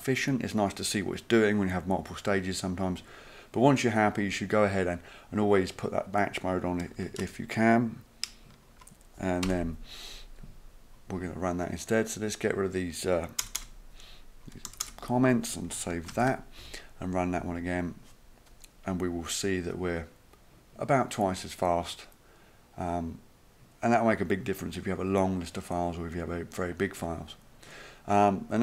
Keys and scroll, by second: 9.5 Delete, 13.4 BackSpace, 13.6 BackSpace, 14.7 BackSpace, 14.8 BackSpace, 16.1 ctrl+s.